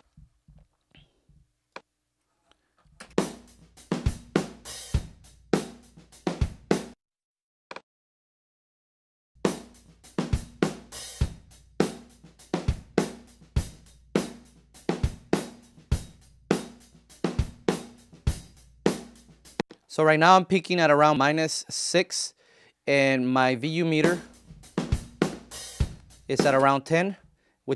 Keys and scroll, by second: 2.9 space, 6.8 space, 9.2 space, 19.5 space, 23.8 space, 26.5 space.